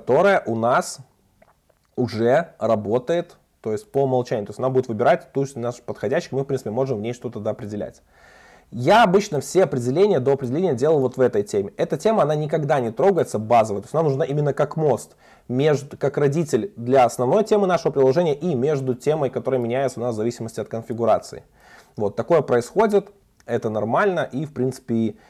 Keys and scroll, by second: 4.4 super+b, 6.8 super+b, 23.2 super+1.